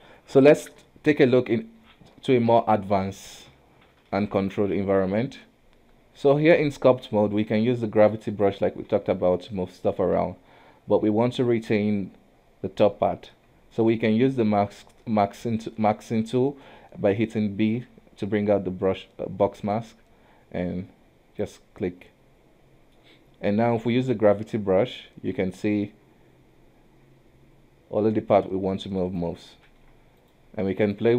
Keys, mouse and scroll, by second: 0.6-1.0 scroll down 3, 1.0-4.1 middle drag, 4.1 ctrl+n, 5.6 KP_1, 6.8 middle click, 7.5 click, 9.0 ctrl+z, 10.3 KP_1, 10.7 scroll up 1, 13.8-17.7 shift+middle drag, 17.7 b, 22.0-24.0 middle drag, 24.0 click, 29.8 ctrl+z, 30.3-31.1 drag.